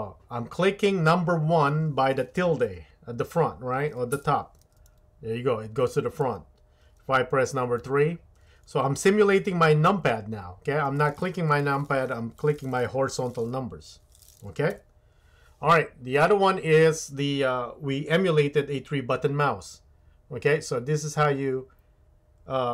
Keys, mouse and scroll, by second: 14.7 KP_1.